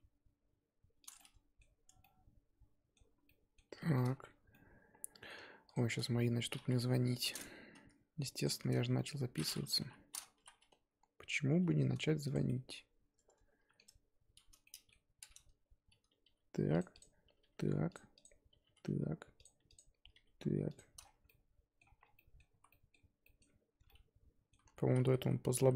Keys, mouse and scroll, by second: 1.2 middle click, 1.8 Tab, 2.0-3.2 middle drag, 3.2 scroll down 1, 3.4 middle click, 4.1 scroll up 4, 4.3 Tab, 4.5-5.7 middle drag, 5.7 click, 6.9 KP_3, 7.8 z, 8.4 click, 9.0 middle click, 9.8 KP_3, 10.4 z, 11.5 g, 12.5-16.1 middle drag, 16.1 g, 17.0 click, 17.3 g, 18.2 click, 18.5 g, 19.8 click, 20.0 g, 21.0 scroll down 4, 21.1 Tab, 21.3 middle click, 22.0 scroll down 2, 22.2 middle click, 22.6 z, 22.7 middle click, 23.4-23.8 scroll up 3, 23.8 z, 23.9 middle click, 24.7 ctrl+z, 24.8-25.7 ctrl+z.